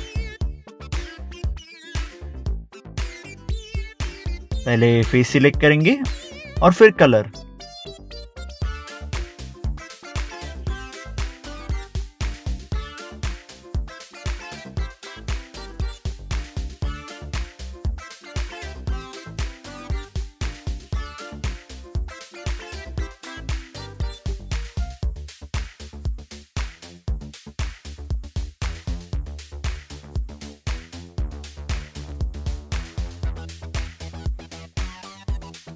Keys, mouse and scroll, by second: 0.6 scroll down 1, 1.6 click, 7.4 click, 10.5 click, 11.7 scroll down 1, 12.4 click, 12.4 double click, 12.5 click, 12.7 double click, 12.9 scroll up 1, 13.0 click, 13.0 scroll down 1, 13.2 scroll up 1, 13.5 middle click, 13.6 scroll down 1, 13.9 middle click, 14.2 click, 14.4 double click, 14.4 click, 14.6 middle click, 14.7 scroll up 1, 14.8 scroll down 1, 15.0 scroll up 1, 15.0 middle click, 15.1 middle click, 15.2 scroll down 1, 16.3 click, 16.4 scroll down 1, 16.6 click, 16.7 scroll up 1, 16.8 click, 17.2 scroll up 1, 17.3 scroll down 1, 17.8 scroll, 17.9 scroll up 1, 18.1 middle click, 18.2 scroll down 1, 18.4 click, 18.5 scroll up 1, 18.6 middle click, 18.7 middle click, 18.8 scroll down 1, 19.1 click, 19.2 scroll up 1, 19.3 scroll down 1, 19.5 click, 20.5 double click, 20.9 scroll up 1, 21.2 middle click, 21.4 click, 21.4 scroll up 1, 21.9 middle click, 22.1 middle click, 22.3 scroll down 1, 23.1 ctrl+Tab, 23.7 click, 27.1 middle click, 27.1 middle click, 27.3 click, 27.3 double click, 27.5 click, 28.2 scroll down 1, 28.4 click, 29.0 scroll up 1, 29.2 scroll down 1, 29.5 click, 29.6 scroll up 1, 29.9 click, 30.0 double click, 30.3 click, 31.1 scroll up 1, 31.2 scroll down 1, 31.3 middle click, 31.6 scroll up 1, 31.9 scroll down 1, 32.1 scroll up 1, 32.2 click, 32.2 scroll down 1, 32.6 scroll up 1, 32.7 scroll down 1, 32.9 click, 33.0 scroll up 1, 33.0-33.4 scroll down 2, 33.2 middle click, 33.3 middle click, 33.5 click, 33.8 click, 34.3 click, 34.6 scroll down 1, 34.9 click, 35.6 scroll up 1.